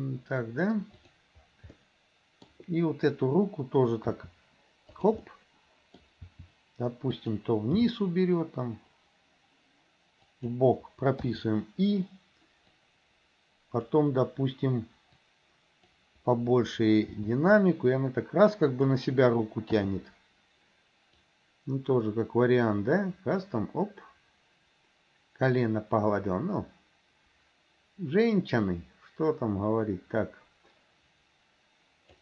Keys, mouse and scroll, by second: 1.1 click, 1.7-2.5 middle drag, 4.2 r, 5.3 middle click, 6.4 r, 7.7 g, 12.9-14.0 drag, 15.3 click, 17.1 g, 19.9 i, 21.3-32.2 drag.